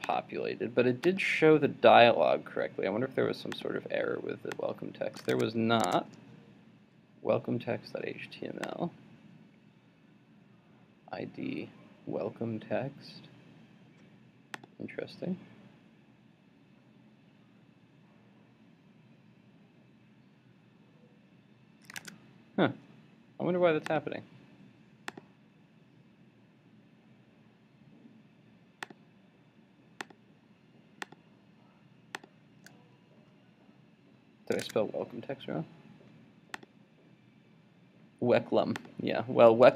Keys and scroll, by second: 5.3 super+Tab, 22.0 super+Tab, 34.6 super+Tab.